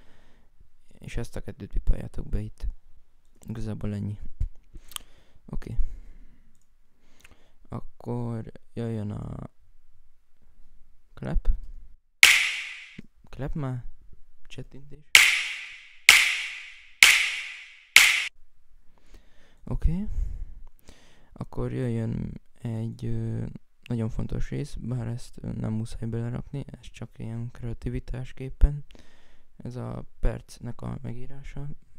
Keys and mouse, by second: 3.3 Escape, 4.4 F5, 5.4 right click, 5.9 right click, 19.3 right click, 20.0 right click, 31.4 F1.